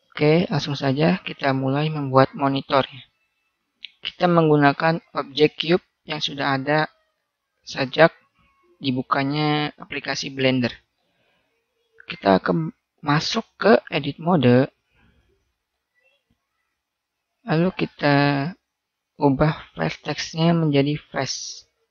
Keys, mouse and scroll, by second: 7.5-10.7 middle drag, 11.9 click, 12.5 click, 13.3-13.9 typing, 13.9 click, 15.1-17.3 middle drag.